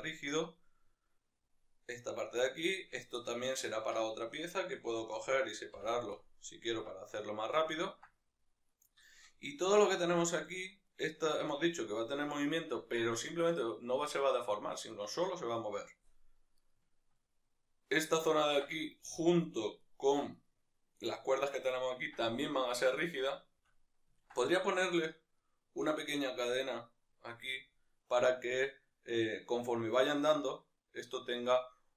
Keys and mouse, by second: 3.2-4.3 middle drag, 3.9 Tab, 4.3 right click, 4.8 l, 6.2 p, 6.8 Tab, 7.4-8.7 shift+middle drag, 8.7-9.1 right drag, 9.1-10.9 shift+middle drag, 10.9-18.4 right drag, 18.4-19.8 ctrl+middle drag, 19.8-23.0 right drag, 23.0-31.9 middle drag.